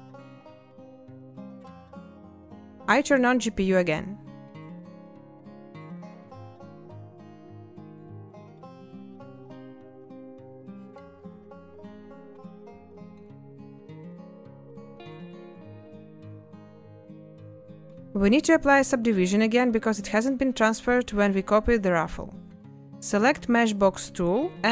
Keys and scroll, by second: 1.1 n, 2.6 a, 6.0 space, 8.2 ctrl+space, 15.2 n, 18.0 a.